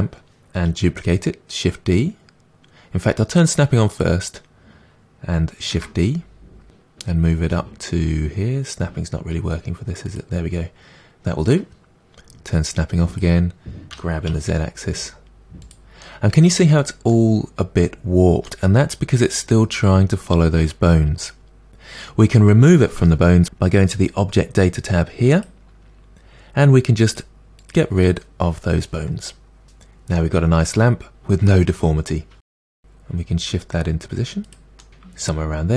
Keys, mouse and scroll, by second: 4.0 click, 5.7 shift+d, 13.2 click, 14.0 g, 16.0-27.2 middle drag, 27.2-30.2 drag, 30.2-33.3 middle drag, 33.3 g, 34.5 middle click, 35.1 g.